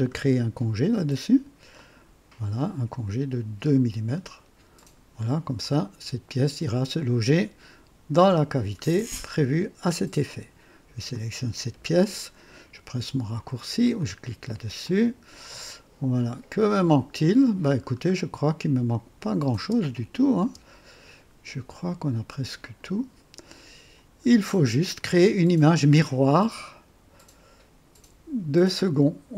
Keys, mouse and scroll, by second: 1.7 click, 3.4 scroll up 2, 4.7 click, 5.6 click, 6.8 click, 8.8-9.2 scroll down 2, 11.0 click, 13.9 click, 14.8 click, 15.9-17.7 drag, 17.8-18.2 scroll down 2, 19.1 click, 19.5 space, 20.3 space, 22.5 click, 24.2 scroll down 1, 24.8-25.5 drag.